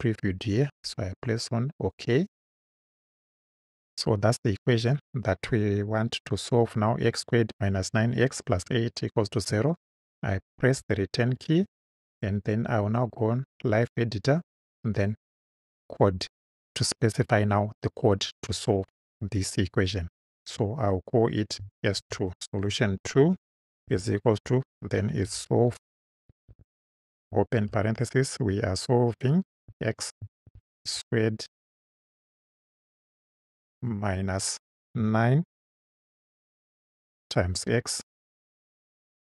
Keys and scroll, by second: 10.5 Return, 22.0 shift+s, 23.2-27.6 typing, 29.7-31.5 typing, 33.8 -, 35.0 9, 36.7 *, 37.7 x.